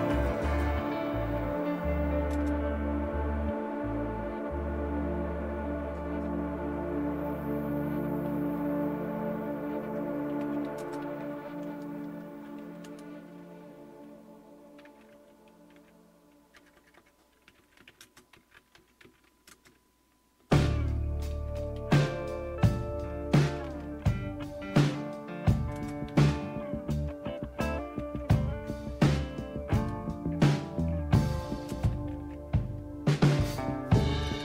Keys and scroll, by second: 0.0-0.2 typing, 1.4-2.3 typing, 8.6-12.7 typing, 14.9-34.3 typing.